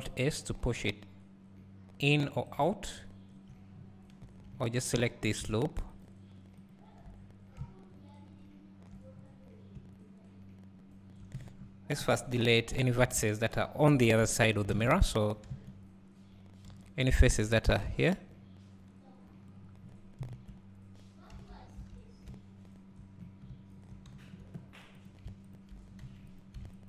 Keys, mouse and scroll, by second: 4.2-4.6 scroll up 2, 4.6 3, 5.0 `, 6.1 alt+click, 7.6 `, 9.1 scroll down 2, 9.8 `, 11.5-12.4 scroll down 1, 12.4 KP_1, 12.8 KP_3, 13.6 ctrl+KP_1, 14.7 alt+a, 15.5 1, 19.5 b, 20.3 KP_Decimal, 23.2 scroll down 1, 23.5 `, 24.2 2, 25.1 click, 26.1 3, 26.4 click.